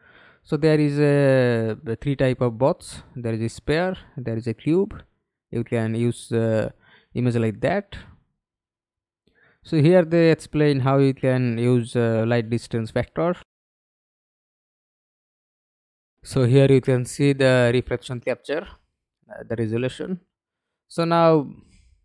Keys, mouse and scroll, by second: 1.0 scroll down 3, 3.0-4.3 scroll down 15, 4.7 scroll down 2, 5.3 scroll down 2, 5.9 scroll up 1, 6.2 scroll down 1, 7.5-8.9 scroll down 10, 13.3-15.3 scroll down 24, 16.2-16.6 scroll down 4, 17.0 scroll down 1.